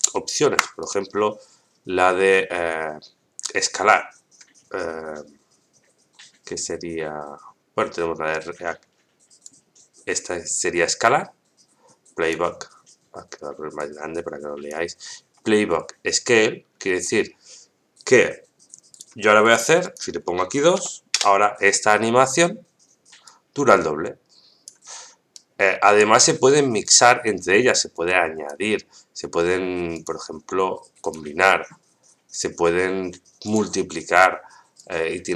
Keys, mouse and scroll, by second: 0.1 shift+middle click, 0.8 right click, 9.4-12.3 drag, 13.7 click, 18.9 click, 19.8-22.0 drag, 23.3-24.7 drag, 25.3 click, 25.3 right click, 26.2 right click, 27.9-28.5 drag, 29.9-31.1 drag, 32.3-33.5 drag, 34.8-35.3 drag.